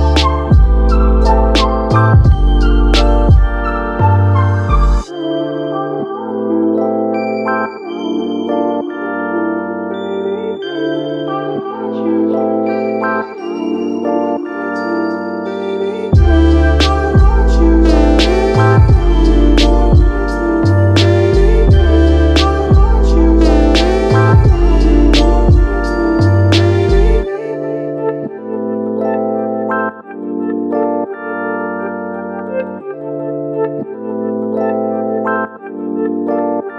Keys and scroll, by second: 3.2 ctrl+z, 4.3 ctrl+c, 4.4 ctrl+v, 7.4 1, 7.7 Return, 8.6 ctrl+z, 12.9 1, 13.3 Return, 20.2 1, 20.6 Return.